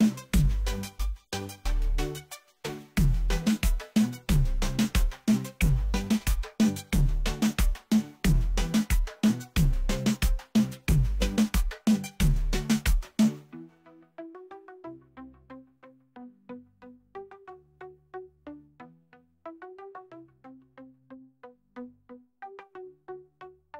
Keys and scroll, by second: 0.9 shift+;, 9.0 s, 9.3 c, 10.6 space, 14.5 space.